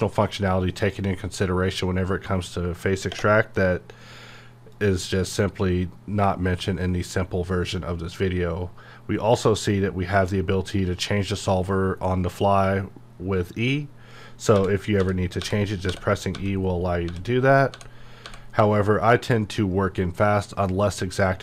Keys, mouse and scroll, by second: 0.0 click, 3.1 space, 4.7 click, 14.9 e, 19.0 typing.